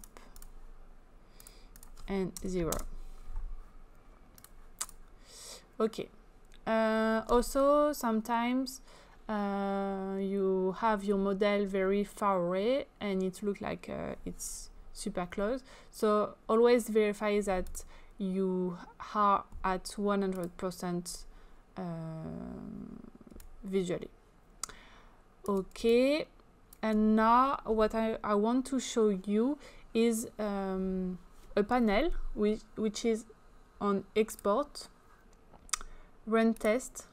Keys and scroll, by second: 2.4 0, 2.7 Return.